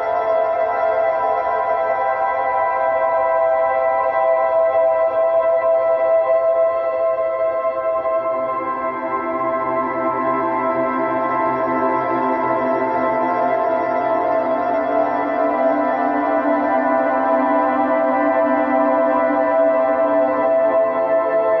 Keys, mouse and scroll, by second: 0.5 shift+click, 0.8-2.8 middle drag, 2.8 click, 3.9 middle click, 4.5 shift+click, 4.8 shift+click, 5.3 shift+click, 5.7 shift+click, 6.1-7.5 middle drag, 7.5 s, 8.7-10.8 middle drag, 11.3 a, 11.9 5, 13.4-15.3 middle drag, 15.3-16.8 drag, 19.0 click, 19.6-20.9 middle drag, 20.9-21.6 scroll up 2.